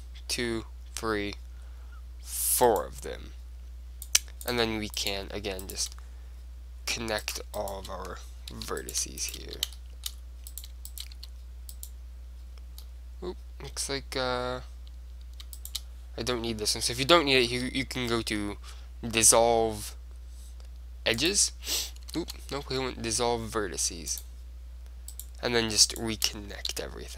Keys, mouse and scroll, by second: 2.9-4.8 right drag, 4.2-6.5 drag, 5.1-9.8 right drag, 8.7 f, 9.6 f, 9.8-11.4 drag, 9.8-11.8 middle drag, 11.3 f, 11.6-12.9 right drag, 12.9 click, 12.9-14.8 middle drag, 15.7-17.6 right drag, 17.6 x, 22.3 ctrl+z, 22.8 x, 25.3-27.1 right drag, 26.8 f.